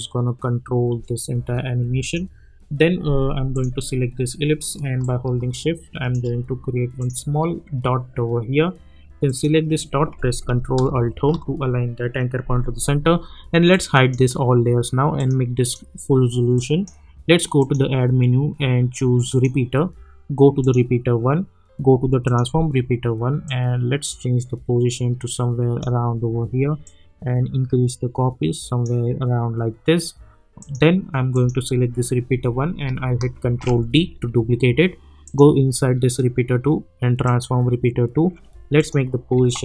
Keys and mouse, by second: 1.3 space, 2.0 click, 5.1-7.0 shift+drag, 9.2 click, 11.1 ctrl+alt+Home, 13.7-30.6 drag, 33.3 ctrl+d, 35.2 click.